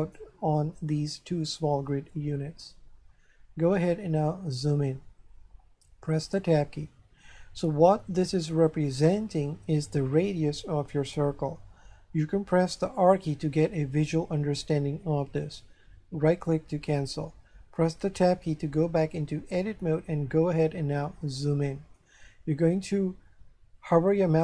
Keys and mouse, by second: 2.2 shift+middle click, 6.7 Tab, 12.6 r, 16.3 right click, 18.1 Tab, 21.2 shift+middle click.